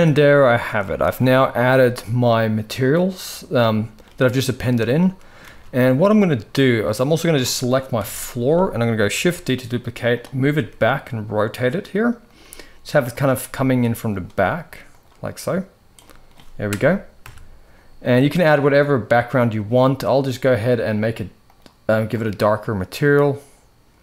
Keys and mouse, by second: 0.2 shift+middle drag, 0.8 ctrl+s, 1.2 shift+middle drag, 3.4-4.2 shift+middle drag, 4.3-5.0 shift+middle drag, 5.2 ctrl+s, 7.7 KP_3, 8.8 shift+d, 10.3 r, 12.1 g, 13.2 middle click, 13.9 click, 14.0 s, 15.6 click, 16.9 KP_0, 18.8 click, 20.2 click, 21.1 click.